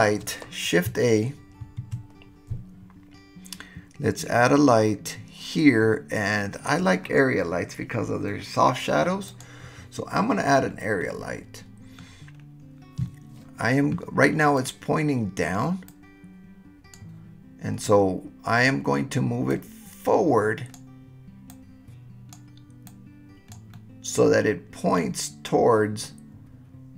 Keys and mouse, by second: 11.0-12.1 middle drag, 15.9-16.9 drag, 17.8-18.6 middle drag, 19.6-20.7 drag, 21.5-22.3 drag, 22.9 click, 23.7-25.0 middle drag, 26.0-26.9 middle drag.